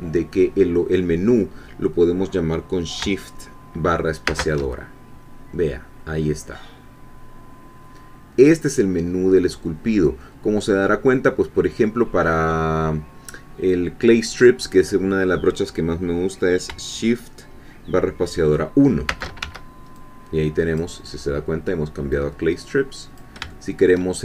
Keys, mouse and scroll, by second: 4.3 shift+space, 19.1 shift+space, 19.4 shift+1, 19.9-20.9 shift+drag, 22.1-23.4 drag, 23.5 shift+middle click.